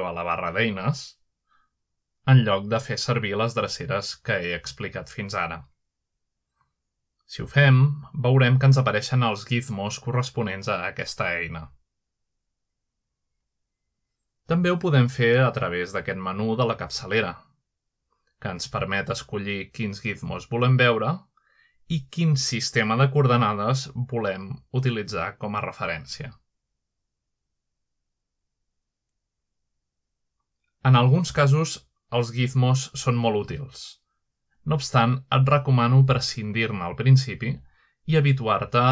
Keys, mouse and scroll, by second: 0.5 shift+space, 2.6 click, 3.6 click, 5.4-7.9 drag, 8.7-9.9 drag, 10.2-11.4 middle drag, 11.2-13.8 drag, 14.5 click, 17.9 shift+space, 19.1 click, 21.0 click, 22.6 click, 23.4 click, 24.4 click, 26.4 click, 27.6 click, 28.8 click, 29.5 middle click, 30.0-30.8 middle drag, 30.9-32.9 drag, 33.5-34.2 middle drag, 34.1-36.6 drag, 37.4-38.2 middle drag, 38.4-38.9 drag.